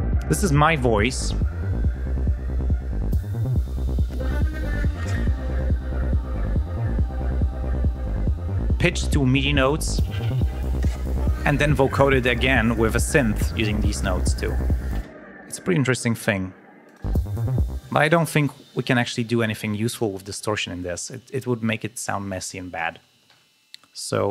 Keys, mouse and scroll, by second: 0.1 ctrl+scroll down 2, 3.3 ctrl+scroll up 2, 5.6 ctrl+scroll down 2, 10.1 ctrl+scroll up 2, 14.9 space, 16.8 click, 16.9 space, 17.7 space, 18.8 scroll down 2, 20.9 ctrl+scroll down 2, 23.2 ctrl+alt+p.